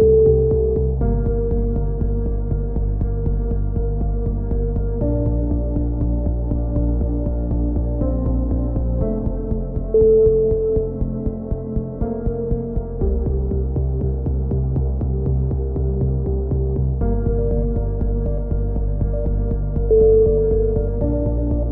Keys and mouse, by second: 2.1 middle click, 4.0 s, 5.8 click, 8.5-10.0 middle drag, 10.0 e, 10.9 click, 13.9 click, 17.0 e, 18.0 click, 20.4 KP_7.